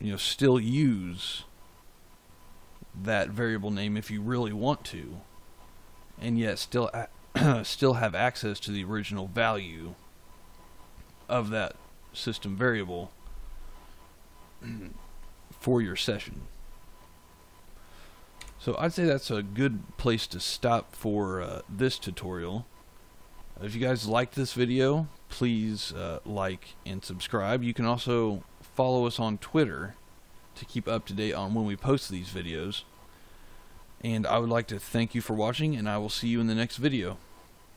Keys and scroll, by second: 18.3 g.